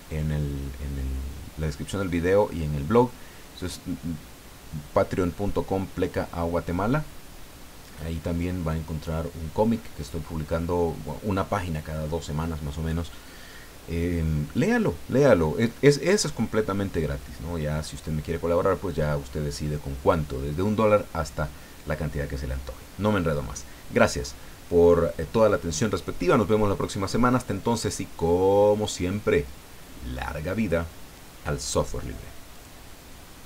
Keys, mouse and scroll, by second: 27.8-30.3 middle drag, 32.5 click, 33.4 click.